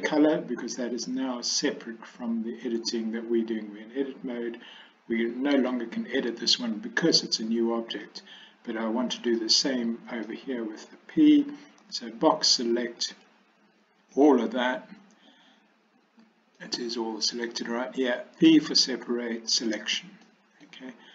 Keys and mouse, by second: 0.7 click, 8.0 click, 9.5 middle click, 11.9 b, 16.7 middle click, 18.5 p, 20.4 middle click.